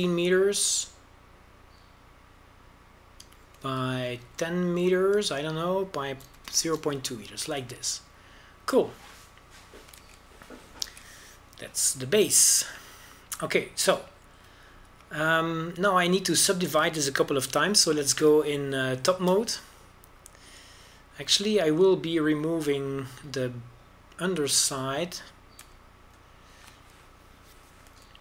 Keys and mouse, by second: 0.4-2.4 drag, 10.0-11.4 drag, 11.7 shift+z, 12.7 shift+z, 16.6 Tab, 17.6 a, 18.9 KP_7, 19.3 KP_5, 19.8 z, 26.1-27.3 right drag, 27.3 x.